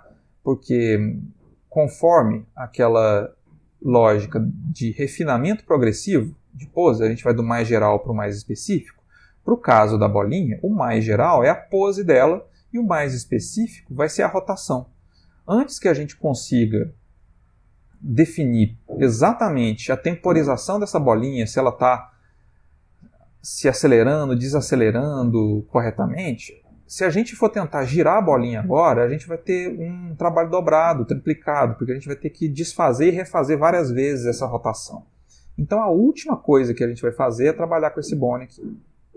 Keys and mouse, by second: 1.2 Escape, 19.0 click, 35.6 click, 36.5 r.